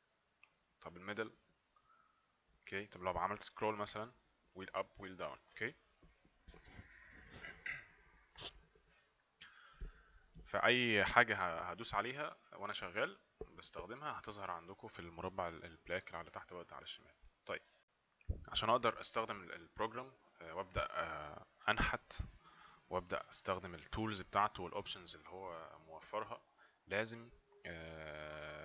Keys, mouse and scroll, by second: 1.6 middle click, 3.8-4.3 scroll up 1, 4.3-4.7 scroll down 1, 4.8 scroll up 1, 5.0 scroll down 1.